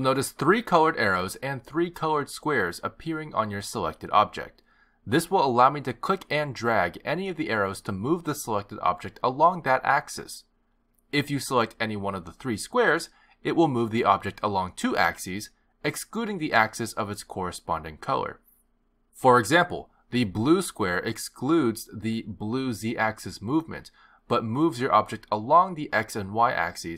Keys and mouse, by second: 6.9 click, 14.3 click, 17.6 click, 21.6 click, 23.8 click.